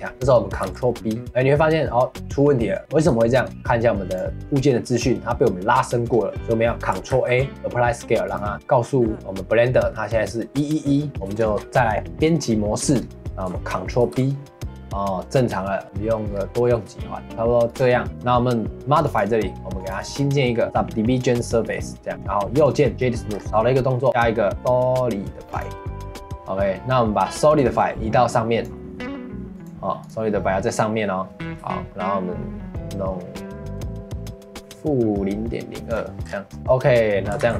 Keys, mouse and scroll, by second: 0.1 middle click, 0.6 ctrl+b, 3.1 Tab, 4.1-6.6 drag, 6.6 middle click, 7.1 ctrl+a, 11.1 shift+middle click, 11.6 Tab, 14.0 ctrl+b, 18.1-22.1 drag, 22.1 middle click, 22.5 right click, 23.3 scroll down 2, 23.4 middle click, 24.1-33.7 drag, 36.2 scroll down 3, 36.5 middle click, 36.7 middle click, 37.4 ctrl+s.